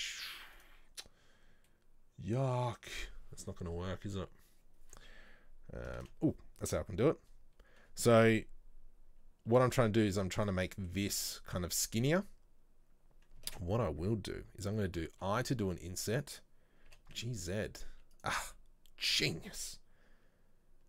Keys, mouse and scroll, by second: 1.7-6.1 middle drag, 6.1 ctrl+z, 9.6 e, 10.8-13.6 middle drag, 13.6 ctrl+z, 15.2 i, 18.6-20.8 middle drag.